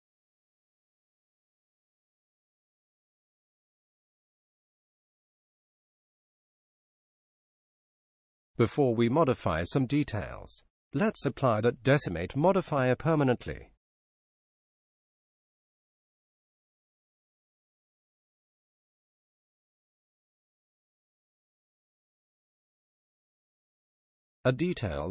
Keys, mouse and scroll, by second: 4.8-6.5 drag, 13.1-14.9 drag, 18.0 click, 23.7-25.1 drag.